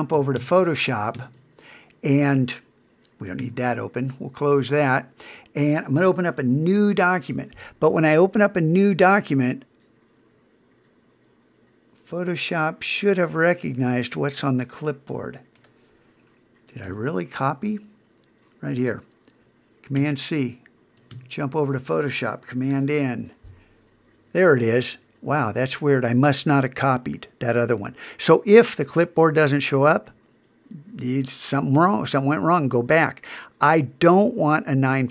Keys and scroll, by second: 4.3 super+w, 6.8 super+n, 16.8 super+Tab, 20.0 super+c, 21.1 super+Tab, 22.7 super+n.